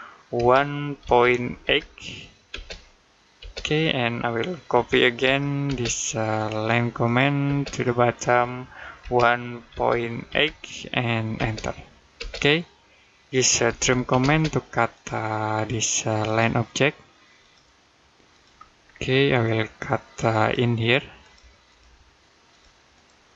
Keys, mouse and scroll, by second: 0.2 typing, 2.3 space, 4.5-5.5 typing, 6.2 click, 7.3 space, 7.5 click, 8.8 typing, 11.2 space, 13.5 t, 13.9 space, 14.8 click, 18.7-20.2 scroll up 1, 20.2 click.